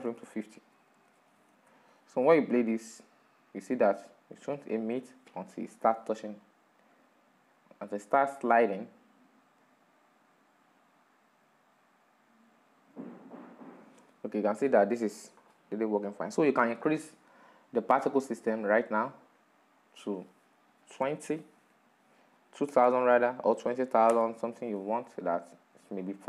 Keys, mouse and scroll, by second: 1.9-7.6 drag, 17.1-24.5 drag, 24.5 o.